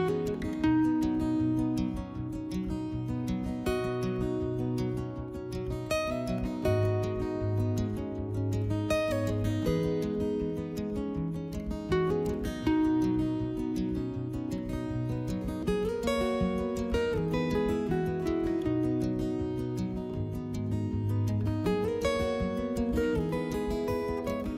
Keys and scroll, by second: 2.0 3, 2.6 w, 5.3 3, 7.7 s, 9.8 s, 12.2 s, 15.0 2.